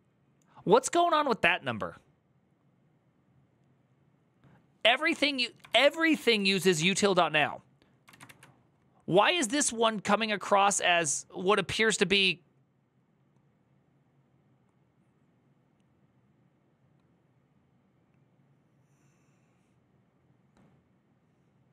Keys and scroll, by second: 5.5 ctrl+a, 5.7-7.0 typing, 7.9 ctrl+a, 8.0 2.